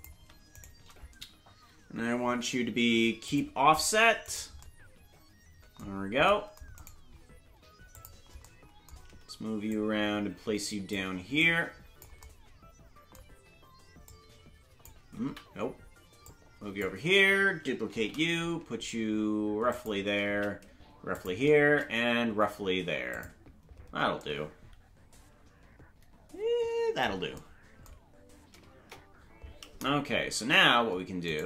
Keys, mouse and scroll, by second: 0.5 shift+right click, 2.1 ctrl+p, 4.2 right click, 6.7 right click, 7.9 click, 9.6-10.9 shift+drag, 11.4 click, 14.0 click, 15.2 ctrl+z, 16.2 click, 17.9 shift+d, 20.2 shift+d, 24.1 shift+d, 28.7 KP_0, 30.3 ctrl+Tab.